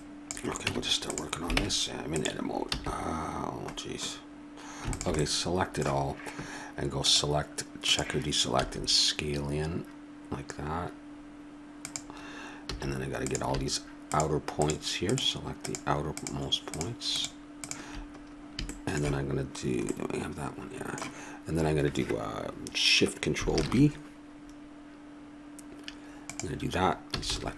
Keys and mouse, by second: 0.7 Tab, 1.6 ctrl+Tab, 2.7 a, 4.9 click, 5.3 middle click, 5.9-6.9 drag, 7.9-9.0 drag, 8.6 s, 12.7 a, 13.3-18.2 drag, 18.2-20.0 middle drag, 20.4 middle click, 27.2 a.